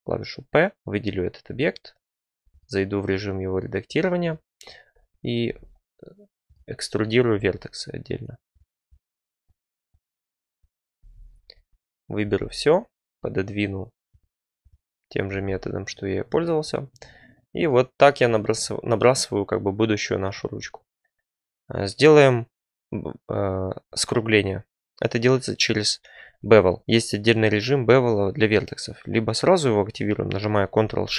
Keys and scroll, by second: 0.7 Tab, 1.4 Tab, 5.4 e, 7.3 e, 10.9 a, 12.2 g, 15.2 g.